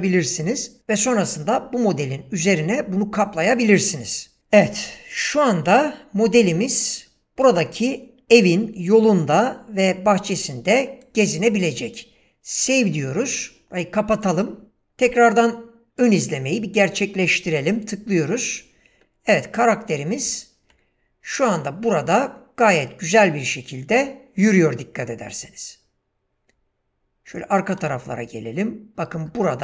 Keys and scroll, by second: 17.8 w, 20.2 space, 21.4 w, 27.9 space.